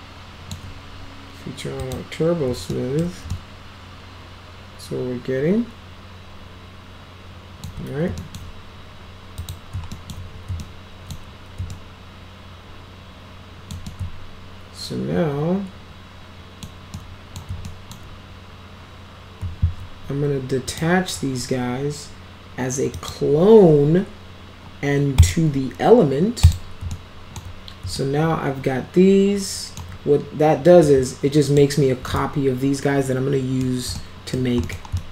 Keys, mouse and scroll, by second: 1.8 click, 2.8 alt+middle click, 3.3-7.7 alt+middle drag, 8.2 alt+middle click, 9.4 click, 10.0 alt+middle click, 10.6 alt+middle click, 11.7-13.7 alt+middle drag, 13.9-16.7 alt+middle drag, 17.0-17.4 middle drag, 17.7 alt+middle click, 20.7 click, 23.0 click, 25.2 click, 26.5 click, 27.0 alt+middle click, 28.0-29.8 alt+middle drag, 30.9 click, 32.1-33.7 alt+middle drag, 34.0 alt+middle click, 34.7 middle click, 35.0 alt+middle click.